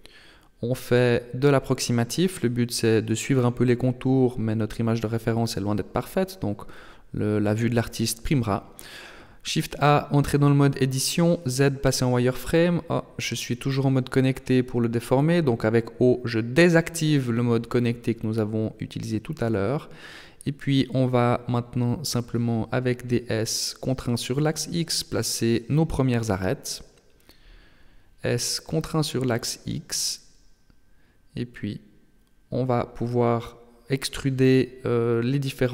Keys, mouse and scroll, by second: 2.5 shift+middle click, 3.5-4.1 scroll up 1, 4.1 shift+middle click, 8.1 shift+a, 9.9 Tab, 11.2 z, 11.8 s, 14.8 o, 16.6 s, 21.9 right click, 22.3 shift+right click, 23.1 s, 25.1 right click, 25.5 shift+right click, 26.2 g, 28.5 s, 30.9 right click, 31.2 shift+right click, 31.9 s, 34.0 right click, 34.9 shift+right click.